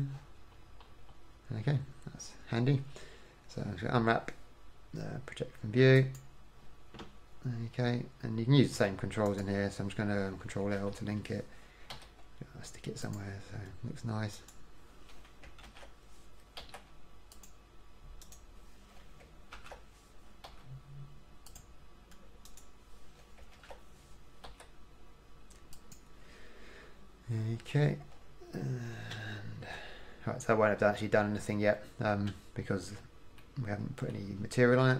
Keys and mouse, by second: 0.8-4.2 drag, 4.2 u, 9.5-11.0 drag, 11.0 ctrl+l, 12.2 g, 14.6 click, 15.8 ctrl+l, 16.8 g, 19.8 ctrl+l, 20.7 g, 23.8 ctrl+l, 24.7 g, 29.4 Tab, 29.9 Tab, 30.1 Tab, 32.5 Tab, 33.6-34.9 middle drag.